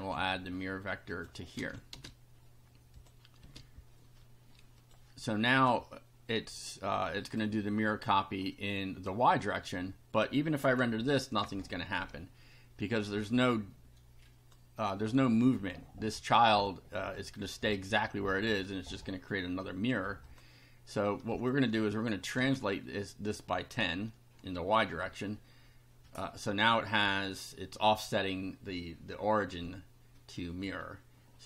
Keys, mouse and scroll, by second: 1.1 click, 1.6 ctrl+v, 1.9 ctrl+space, 3.0 click, 3.4 space, 4.8 click, 7.2 click, 8.5 click, 11.4 F5, 12.9-14.7 drag, 16.5-17.8 drag, 20.3 click, 21.3 click, 22.4 1, 30.6 F5.